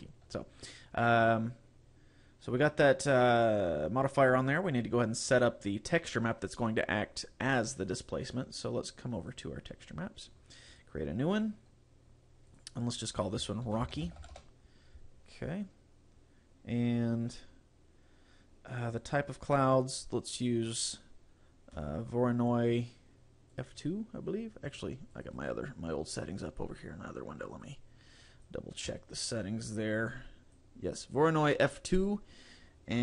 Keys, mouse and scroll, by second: 9.2 click, 9.9-10.8 scroll up 5, 10.8 click, 12.1-12.4 scroll up 2, 12.6 click, 19.0 click, 21.0 click.